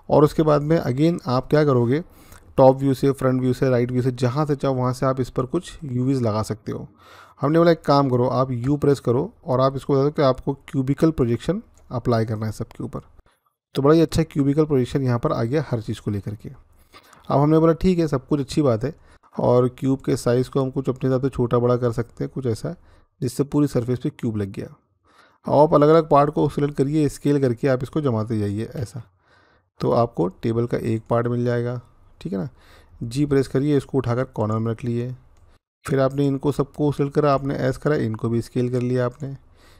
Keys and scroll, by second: 8.4 u, 28.6 s, 33.0 g, 37.1 s.